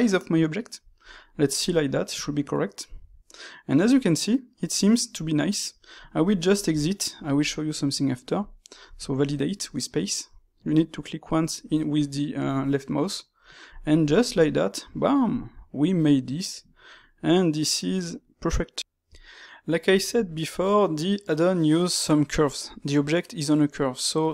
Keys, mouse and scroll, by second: 1.5-4.4 middle drag, 6.2-10.3 middle drag, 11.1-13.6 middle drag, 13.6 click, 14.2-17.4 ctrl+middle drag.